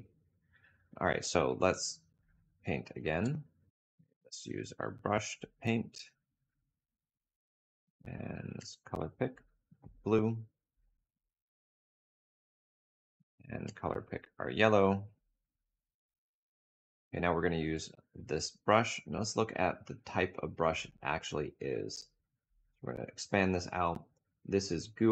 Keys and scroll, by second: 6.0 p, 17.3 b.